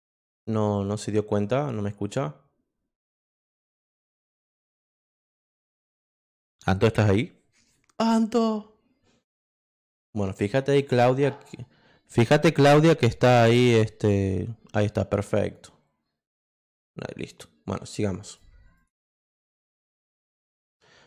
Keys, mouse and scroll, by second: 4.0 click, 16.4-18.2 drag, 18.2 click, 18.7 click, 20.1 click.